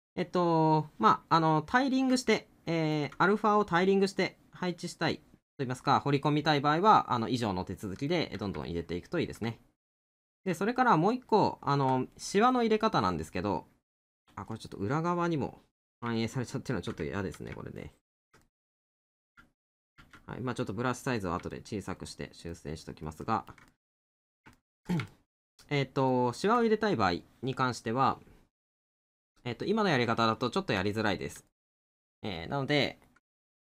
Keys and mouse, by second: 1.2 middle click, 2.5 middle click, 8.1 middle click, 10.9 middle click, 12.6 middle click, 14.3 middle click, 16.2 middle click, 18.5 middle click, 20.6 middle click, 31.0 middle click.